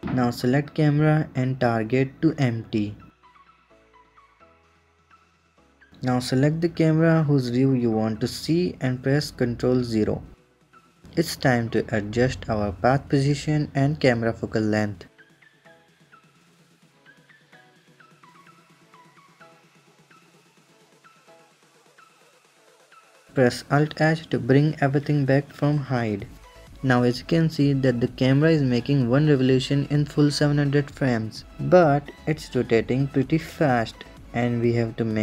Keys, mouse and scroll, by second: 0.1 click, 1.5-4.5 drag, 4.8 click, 6.7 click, 7.5 click, 8.5 click, 9.5 ctrl+KP_0, 10.8 s, 11.4 KP_0, 12.0 s, 13.1 KP_0, 13.7 s, 14.5-15.0 scroll up 2, 15.5-17.4 drag, 18.0 click, 18.9 click, 19.5 click, 21.2 click, 24.4 alt+h, 26.8-30.4 drag.